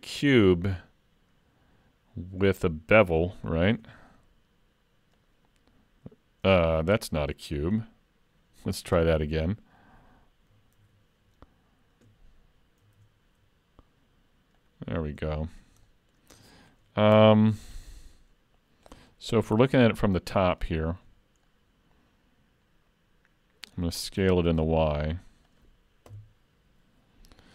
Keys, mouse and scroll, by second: 3.7 shift+a, 9.0 Delete, 10.8 ctrl+a, 13.0 shift+a, 15.4 shift+middle click, 15.9 middle click, 16.5 shift+middle click, 17.2 KP_Decimal, 17.7-18.1 scroll down 5, 18.1 middle click, 19.3 KP_7, 21.5 middle click, 24.2 s, 26.1 KP_7.